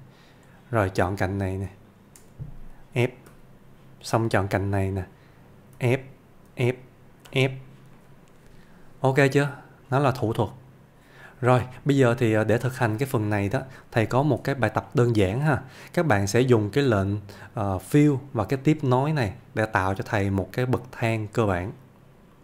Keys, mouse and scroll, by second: 1.2 click, 1.9 shift+click, 3.3 f, 4.7 click, 5.8 f, 8.0-9.6 middle click, 10.2 scroll down 1, 11.6 Tab, 12.3-12.9 middle click, 14.9-15.5 shift+middle click, 16.5 click, 20.2-21.4 click.